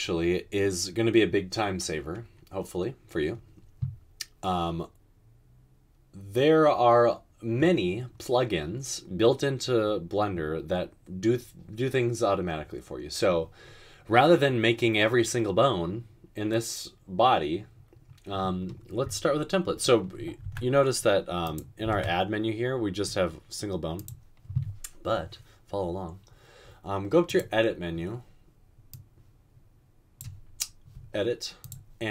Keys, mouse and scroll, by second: 20.5 typing, 21.9 typing.